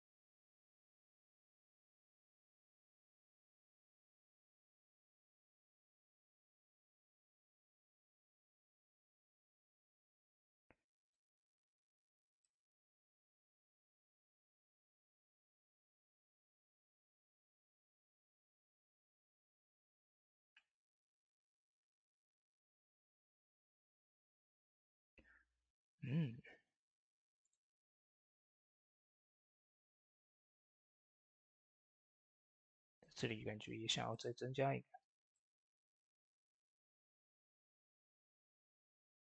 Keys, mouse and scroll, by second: 1.4 click, 1.4 typing, 1.4-17.2 drag, 18.5-25.3 drag, 18.5 typing, 26.3 click, 26.3-27.3 typing, 27.3 click, 28.3 shift+d, 32.1-38.1 drag, 32.1 typing, 38.7-39.3 middle drag.